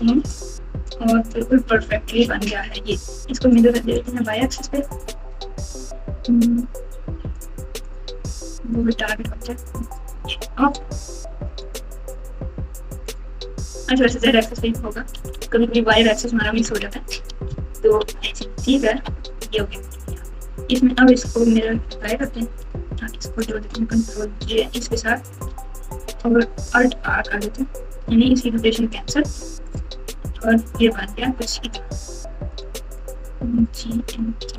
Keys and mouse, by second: 4.0-5.8 drag, 7.8 click, 11.6 click, 12.1 click, 14.0 click, 15.1 KP_4, 15.3 KP_4, 15.4-15.9 KP_4, 16.6 KP_1, 17.5 KP_Subtract, 17.8 KP_Subtract, 17.9 KP_Subtract, 17.9 KP_Subtract, 18.5 KP_4, 18.7 KP_4, 18.9 KP_4, 21.6 ctrl+a, 23.4 shift+click, 24.6 ctrl+j, 25.4 r, 28.4 alt+r, 29.6 click, 30.2-30.9 typing, 32.9 click, 34.4 g.